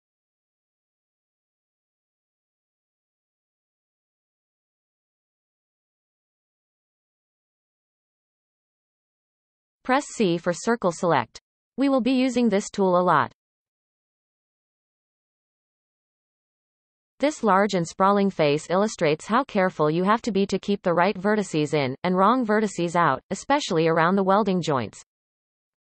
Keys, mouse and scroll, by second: 0.6 shift+click, 1.5 f, 1.8-2.4 scroll down 2, 2.4-2.9 scroll down 1, 2.9-3.3 shift+middle drag, 3.3 scroll up 1, 4.2 alt+a, 5.1-6.3 shift+middle drag, 6.3 scroll up 1, 7.9 shift+middle click, 8.4-8.9 scroll up 1, 10.0 c, 19.9-21.7 scroll up 4, 21.7-22.3 scroll down 3, 22.3-23.5 shift+middle drag, 23.5 c.